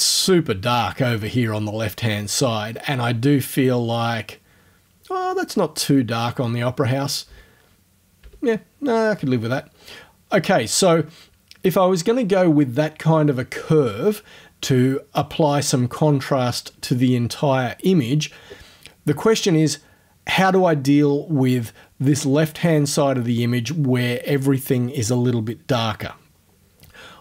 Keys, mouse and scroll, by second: 2.7-3.5 scroll up 1, 7.3 o, 8.2 o, 9.0-9.4 scroll down 1, 9.8 scroll down 1.